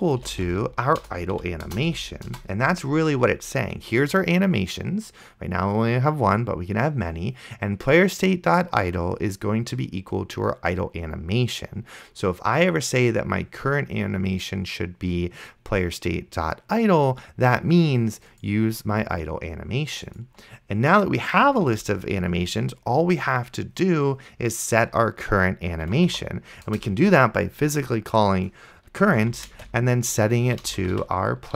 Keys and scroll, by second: 0.1-2.3 typing, 1.1 Return, 21.8 Return, 25.8-26.7 typing, 26.7 Return, 29.1-31.5 typing.